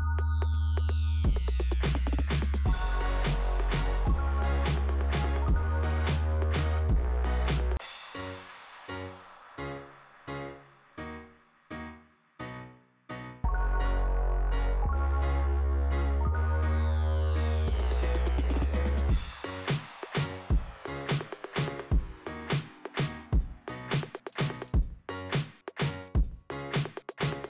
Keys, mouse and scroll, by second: 0.8 click, 1.1 click, 2.8 click, 5.5 click, 6.5 click, 12.6 click, 14.2 click, 15.2 click, 15.4 click, 16.4 click, 18.1 click, 18.8 click, 22.7-24.0 scroll down 3, 25.4 middle click.